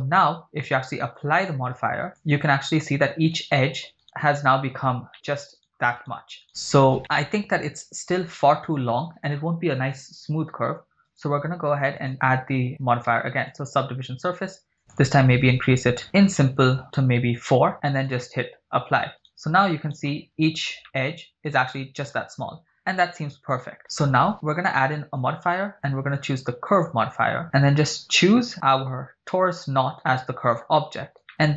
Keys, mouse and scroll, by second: 0.3 Tab, 1.5-2.3 drag, 3.6 right click, 4.1 Tab, 4.1 right click, 4.7 scroll up 2, 5.1 middle click, 5.7 right click, 6.3 right click, 6.5 right click, 7.0 shift+middle click, 7.0 scroll down 2, 11.3 Tab, 12.1-14.0 drag, 14.8-15.9 drag, 16.9 click, 17.8 click, 19.1 Tab, 19.4 right click, 20.1 right click, 20.3-21.1 scroll up 6, 20.8 shift+middle click, 22.2-22.9 scroll down 8, 23.8 Tab, 24.8-27.5 drag, 28.3 click, 30.2-30.7 middle drag, 30.9 scroll up 4, 31.3 shift+middle click.